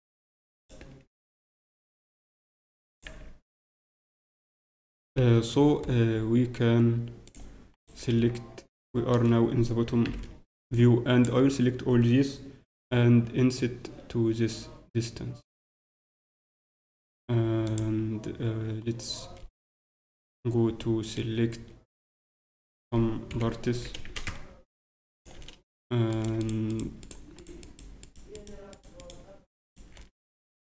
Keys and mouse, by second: 0.3 s, 1.8 s, 3.0 z, 3.8 z, 4.6 z, 5.0 ctrl+KP_7, 7.2 click, 7.7 right click, 8.1 a, 8.6 click, 8.6 right click, 8.8 a, 9.1 a, 10.0 b, 13.4 i, 23.3 ctrl+KP_7, 23.7 s, 26.1-30.6 right drag, 30.0-30.6 middle drag, 30.3-30.6 drag.